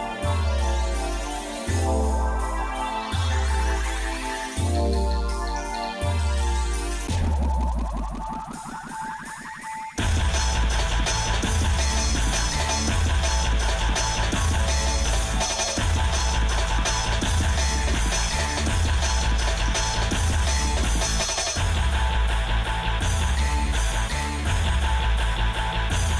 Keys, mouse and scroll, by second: 1.2 ctrl+i, 3.0 click, 3.7 click, 4.5 Tab, 5.3 shift+middle click, 10.0 Tab, 10.6 Tab, 11.0-13.5 shift+middle drag, 13.8 click, 14.6 middle click, 15.2 click, 15.9 g, 18.4-20.4 shift+middle drag, 25.6 click.